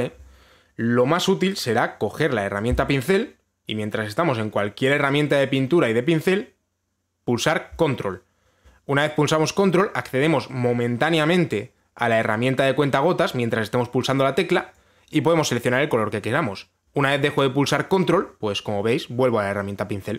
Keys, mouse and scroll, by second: 2.6 click, 3.4 b, 15.4 ctrl+click.